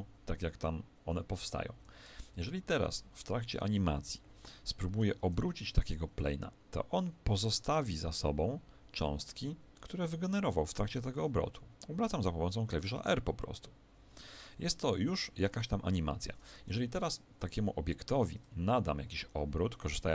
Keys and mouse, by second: 1.7 Escape, 2.7 KP_1, 4.9 alt+a, 6.5 r, 16.5 Escape.